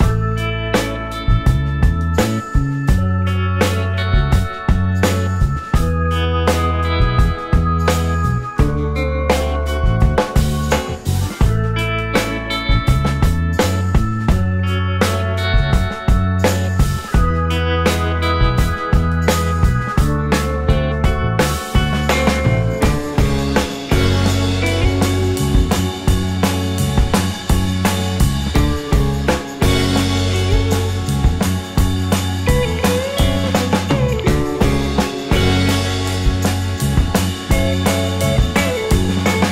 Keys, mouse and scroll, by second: 0.3 scroll up 1, 5.3 ctrl+z, 12.8 typing, 17.7-18.5 typing, 21.6 scroll up 1, 21.6 typing, 21.7 click, 21.7 middle click, 23.5 alt+click, 23.9 alt+middle click, 24.1-24.5 alt+scroll up 1, 24.5 alt+middle click, 24.9 alt+click, 32.9 right click, 37.2-37.9 scroll up 1, 37.9 scroll down 1, 38.3 alt+click, 38.8 alt+right click.